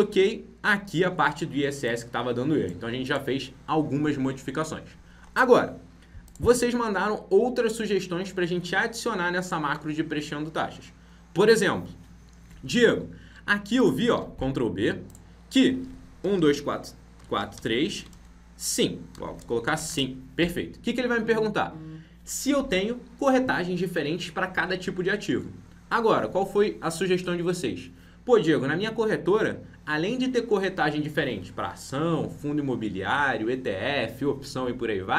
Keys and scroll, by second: 12.4 alt+Tab, 14.1 ctrl+b.